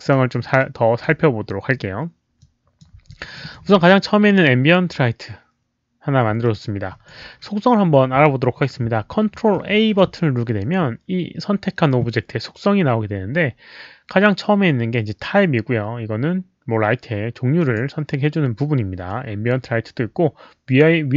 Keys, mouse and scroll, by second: 0.6 alt+click, 2.4 click, 3.1 alt+click, 6.4 alt+click, 9.7 ctrl+a, 17.6 click, 17.7 ctrl+a.